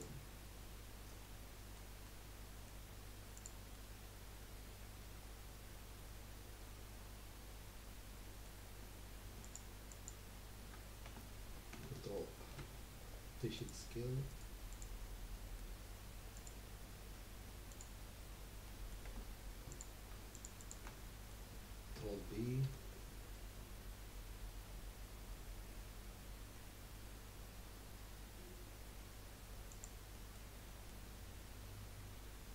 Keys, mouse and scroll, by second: 0.9-1.2 scroll down 1, 1.2-3.3 middle drag, 3.3 click, 3.7-6.9 middle drag, 8.7-9.4 scroll up 1, 9.4 alt+shift+click, 9.9 alt+shift+click, 11.1 Tab, 12.5 ctrl+a, 14.3 right click, 15.3-16.3 middle drag, 16.3 click, 17.2-18.8 drag, 18.8 middle click, 19.1 Tab, 19.7 click, 20.3 alt+shift+click, 20.6 alt+shift+click, 21.1-22.6 middle drag, 22.6 ctrl+b, 30.2 middle click, 31.0 scroll up 1.